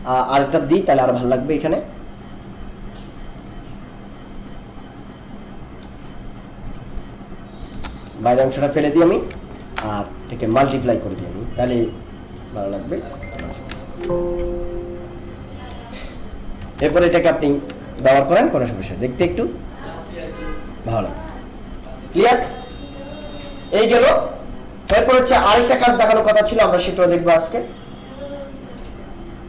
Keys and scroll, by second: 16.7 ctrl+-, 24.9 BackSpace, 25.3 ctrl+-.